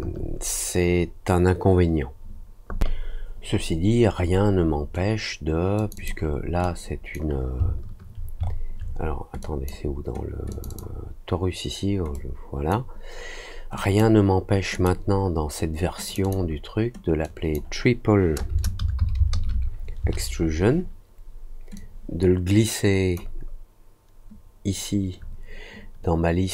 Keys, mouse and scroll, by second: 5.7 click, 5.9 click, 6.6 click, 7.6 alt+middle click, 8.4 alt+middle click, 9.3 drag, 10.4 click, 10.6 click, 12.1 click, 13.7 click, 14.7 click, 16.0 click, 16.2 click, 17.2 click, 21.7-23.1 drag.